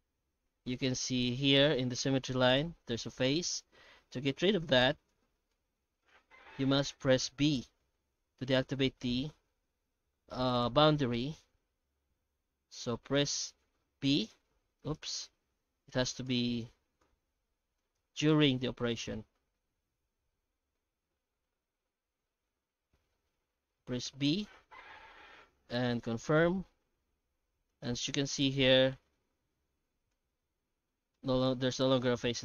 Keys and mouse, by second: 0.5 alt+a, 0.7 right click, 1.1 shift+right click, 1.5 shift+middle click, 2.0 h, 3.6 ctrl+z, 3.8 ctrl+z, 4.2 ctrl+z, 4.5 ctrl+z, 4.9 ctrl+z, 5.5 shift+middle click, 6.4 i, 14.3 b, 15.1 ctrl+z, 15.3 ctrl+z, 16.3 ctrl+z, 17.0 3, 17.8 alt+shift+right click, 19.0 i, 26.3 Tab, 26.8 Tab, 27.3 3, 27.7 right click, 28.1 x, 30.1 h, 31.1 middle click, 32.1 shift+middle click.